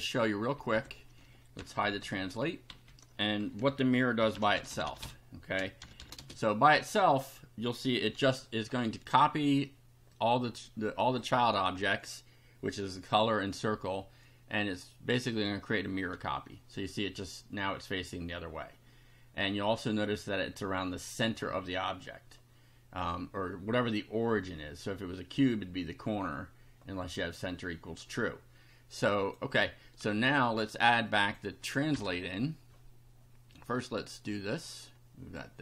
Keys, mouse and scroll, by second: 0.6 /, 1.5 F5, 1.8 Down, 2.7 Down, 3.6 Home, 4.0-6.5 typing, 10.1-11.3 drag, 16.1 F5, 29.2 click, 31.0 click, 32.0 BackSpace, 33.5 click, 34.6 click.